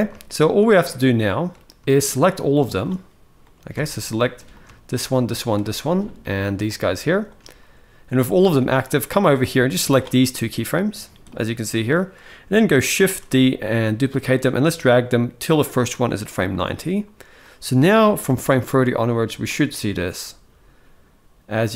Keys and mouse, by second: 0.0-1.2 shift+middle drag, 1.6-2.5 shift+drag, 3.1-3.4 middle drag, 3.5 alt+a, 4.3 click, 4.6 shift+click, 5.0 shift+click, 6.8 shift+click, 8.6-9.8 drag, 9.9 middle drag, 11.0-11.7 drag, 12.7 shift+d, 17.2-17.9 drag, 18.0 space.